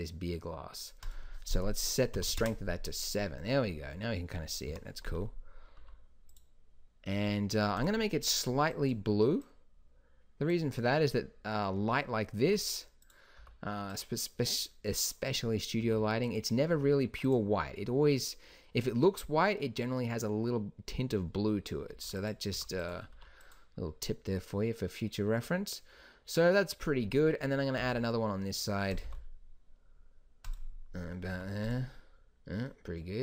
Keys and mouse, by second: 4.8 KP_7, 5.9 g, 12.6 g, 13.5 r, 16.0 r, 16.9 r, 22.0 g, 22.7 r, 23.3 g, 27.9 shift+d, 29.2 r, 31.5 g.